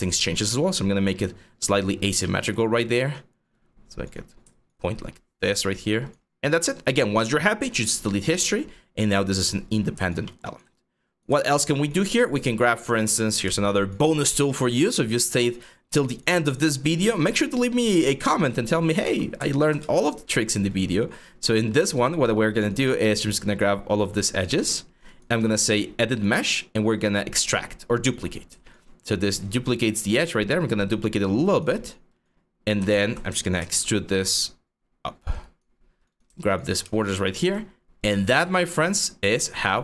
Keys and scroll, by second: 1.6 4, 3.8 5, 5.3 5, 12.7 q, 18.7 ctrl+z, 19.0 ctrl+z, 33.2 ctrl+e, 39.0 3.